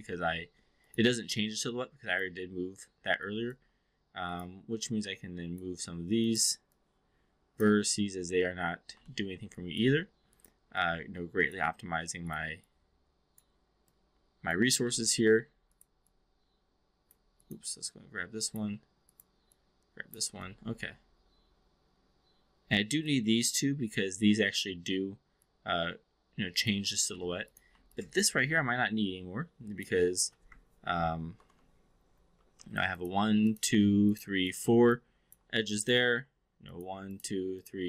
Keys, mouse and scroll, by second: 0.0 alt+middle click, 0.8 click, 1.2-2.2 drag, 3.2 alt+click, 4.2 click, 4.9 click, 6.1 click, 6.7-7.7 drag, 8.9-9.3 alt+middle drag, 9.5 alt+click, 10.2 click, 10.7-11.5 drag, 12.1 click, 12.7-13.4 drag, 13.8-14.6 drag, 15.7 click, 16.1-17.0 drag, 17.2 click, 17.8 click, 19.6 click, 20.4-23.1 alt+drag, 25.4-26.7 alt+drag, 27.1 2, 27.4 click, 27.9-29.9 drag, 29.7 typing, 31.3 ctrl+BackSpace, 32.5 typing, 32.8 click, 33.4 shift+click, 34.0 shift+click, 34.4 shift+click, 34.9-35.4 alt+drag, 36.7 click, 37.5 shift+click.